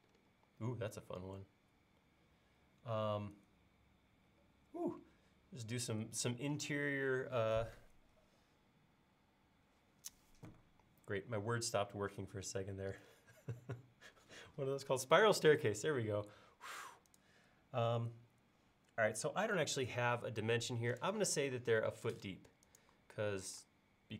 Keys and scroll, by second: 23.5 p.